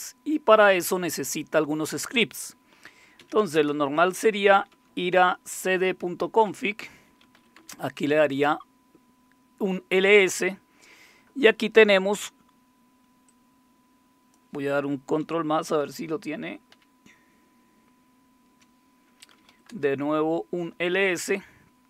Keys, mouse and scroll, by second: 3.0-5.2 typing, 5.7 Return, 6.9-7.7 typing, 13.3-14.4 drag, 16.7 ctrl++, 19.1-20.1 typing.